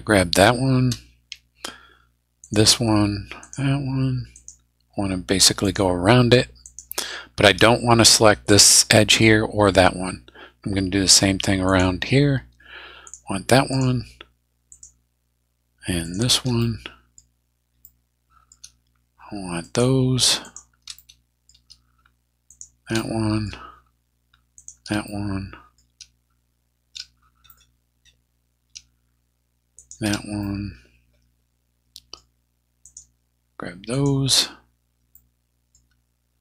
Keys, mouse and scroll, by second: 2.4 shift+right click, 3.4 shift+right click, 4.3 shift+right click, 5.6 shift+right click, 6.6 shift+right click, 11.6 shift+right click, 13.0 shift+right click, 13.7 shift+right click, 14.7 shift+right click, 16.0 shift+right click, 16.6 shift+middle click, 17.2 scroll down 2, 17.8 middle click, 18.3-18.7 scroll up 2, 19.7 shift+right click, 20.4 shift+right click, 21.0 shift+middle click, 22.5 shift+right click, 23.0 shift+middle click, 24.6 shift+right click, 25.1 shift+middle click, 27.3 shift+scroll down 2, 27.5 middle click, 27.5-27.8 scroll up 2, 28.0 scroll up 2, 29.8 shift+right click, 30.4-32.3 shift+middle drag, 32.8 shift+right click, 33.9 shift+right click, 35.1 shift+middle click.